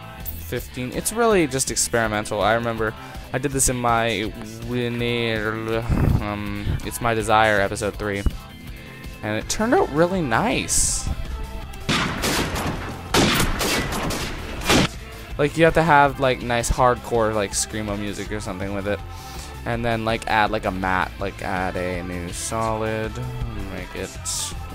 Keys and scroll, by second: 0.9 Return, 5.7 ctrl+0.